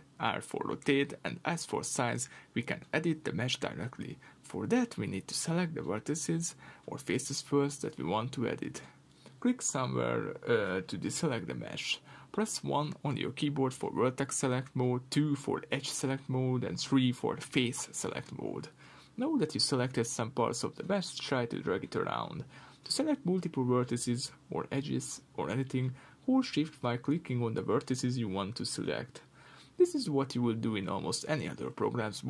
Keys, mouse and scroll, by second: 10.7 1, 12.6 2, 14.2 3, 17.3-18.3 typing, 21.1 click, 21.9 shift+click, 22.6 g, 24.3 Escape, 24.5-27.5 middle drag, 25.2 r, 26.6 Escape, 27.5 shift+click, 28.0 shift+click, 29.2 shift+click, 29.6 shift+click, 30.4-31.4 middle drag, 30.9 3, 31.4 click, 31.8 shift+click.